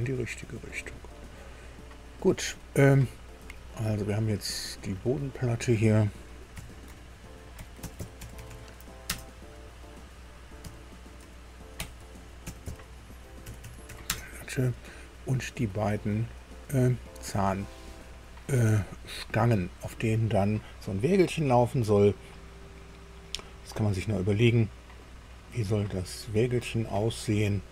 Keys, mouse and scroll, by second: 0.3-0.7 scroll up 2, 1.0-2.2 middle drag, 2.2-2.5 scroll down 2, 3.8 click, 5.3 click, 6.5 F2, 7.6-9.0 typing, 9.0 Return, 10.6 F2, 11.8-14.5 typing, 15.7-17.9 drag, 18.8 scroll up 1, 19.4 click, 22.6 click, 23.7 click, 24.4 click, 25.3 click.